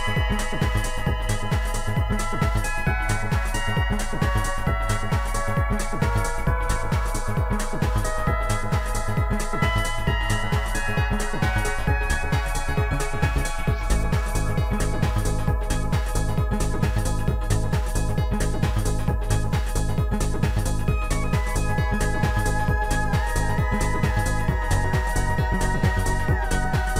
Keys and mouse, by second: 2.4 click, 3.8 click, 8.9 click, 8.9 click, 14.9 click, 15.1 click, 18.4 click, 20.4 shift+click, 23.9 shift+click, 25.0 shift+click, 25.7 right click.